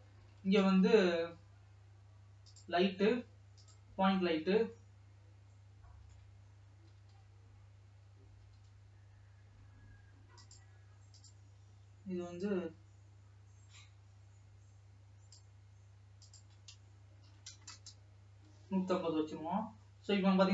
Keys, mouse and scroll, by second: 0.1 alt+a, 0.6 Tab, 1.0 shift+a, 4.9 scroll down 1, 5.1-7.0 middle drag, 7.0-7.5 scroll up 1, 7.5 g, 11.7 click, 16.7-19.2 drag, 19.2 scroll down 2, 20.4-20.5 scroll up 2.